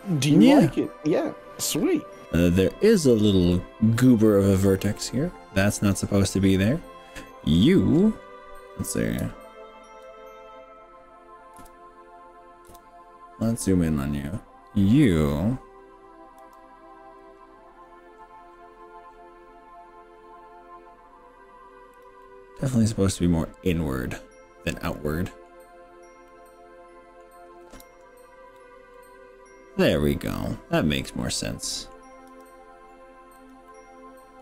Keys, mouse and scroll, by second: 0.0-2.2 middle drag, 3.2 drag, 3.6-4.1 middle drag, 4.4-7.6 middle drag, 9.2 z, 11.0 z, 11.6 KP_1, 12.7 KP_3, 13.5-13.9 scroll up 3, 16.4 g, 17.8-19.6 scroll up 12, 22.0 drag, 22.3-25.5 middle drag, 25.6-26.2 scroll down 4, 26.4-27.4 middle drag, 28.0 z, 29.0-31.9 middle drag, 32.3 g, 33.4 click, 33.7-34.4 middle drag.